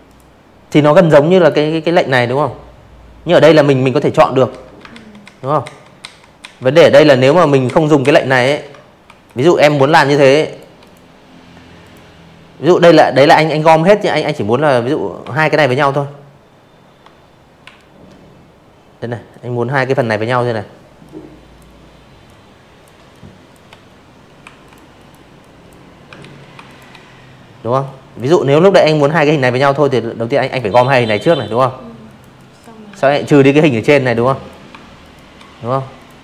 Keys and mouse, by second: 1.4 ctrl+z, 1.9 ctrl+z, 2.2 ctrl+z, 2.6 ctrl+z, 2.9 ctrl+z, 3.4 ctrl+z, 3.8 ctrl+z, 4.2 ctrl+z, 4.6 ctrl+z, 5.0 ctrl+z, 5.4 ctrl+z, 6.0 v, 6.2 click, 6.6 shift+click, 7.8 click, 8.8 click, 11.2 click, 12.5 shift+click, 14.6 m, 16.3 click, 18.0 click, 19.2 click, 20.1 click, 21.4 v, 21.6 click, 21.9 click, 22.3-22.7 drag, 23.1 ctrl+z, 23.6 shift+click, 24.8 click, 27.4 click, 28.4 click, 29.0 click, 29.3 drag, 29.9 ctrl+z, 31.1 click, 32.0 shift+click, 32.9 click, 34.0 ctrl+z, 34.5 ctrl+z, 35.0 ctrl+click, 35.3 ctrl+z, 35.9 click.